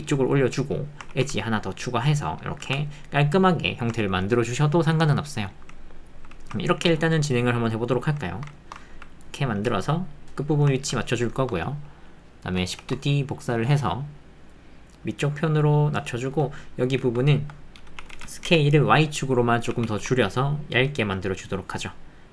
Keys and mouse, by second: 1.1 ctrl+r, 2.6 Tab, 4.3-5.0 ctrl+middle drag, 5.2-6.3 middle drag, 6.4 shift+middle click, 6.6 ctrl+middle click, 6.7 ctrl+click, 6.7 ctrl+middle click, 7.0 middle click, 7.1 click, 7.1 middle click, 7.3 click, 7.4-8.4 middle drag, 8.5 shift+middle click, 8.8 ctrl+middle click, 8.9 ctrl+click, 9.5 g, 10.8-12.6 ctrl+drag, 12.8 shift+d, 17.0 Tab, 17.4 Tab, 18.0 s, 18.4 x, 19.7 s, 20.0 y.